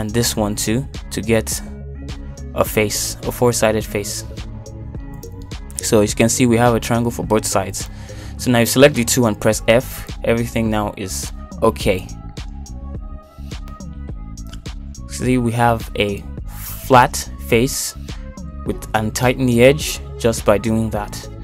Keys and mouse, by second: 0.5 click, 1.2 click, 1.7 click, 2.9 ctrl+z, 4.8 click, 5.5 click, 5.9 click, 6.4 click, 7.0 click, 8.5 ctrl+click, 10.0 f, 12.2 click, 12.7 ctrl+click, 13.7 f, 16.4 Tab, 16.9 middle click, 17.5 shift+middle click, 18.0-19.0 middle drag, 19.4 shift+middle click, 19.9 middle click.